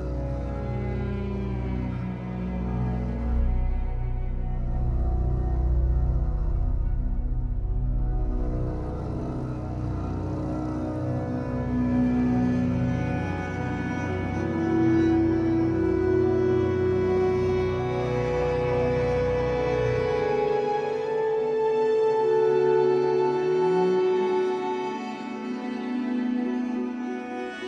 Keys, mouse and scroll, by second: 5.4-6.6 middle drag, 6.6-11.4 drag, 11.4-13.1 middle drag, 11.7-12.1 scroll down 2, 12.3-13.1 scroll up 2, 13.1-17.5 drag, 16.6-17.2 scroll up 2, 17.5-18.5 middle drag, 18.5-23.9 drag, 23.9-25.6 shift+middle drag, 24.8-25.6 scroll up 1, 25.6-27.6 drag.